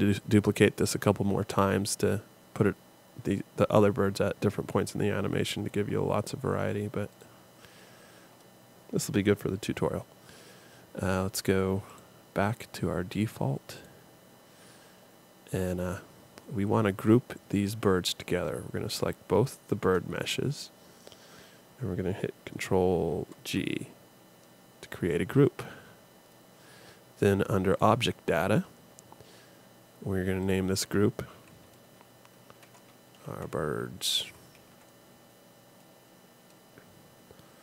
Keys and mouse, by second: 17.4-19.2 drag, 23.1 ctrl+g.